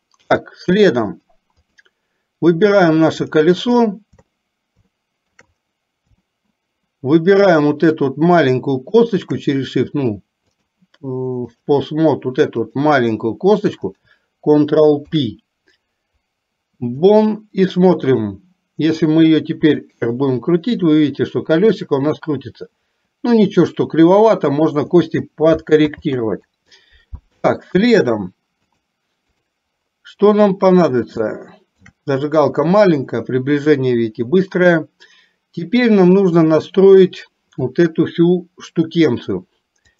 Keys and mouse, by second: 1.2 click, 4.9 shift+middle click, 6.3-7.6 shift+middle drag, 8.9 shift+click, 10.7-11.8 drag, 15.1 ctrl+p, 18.1 click, 19.7 r, 26.1 ctrl+z, 28.8 click, 31.3 shift+middle click.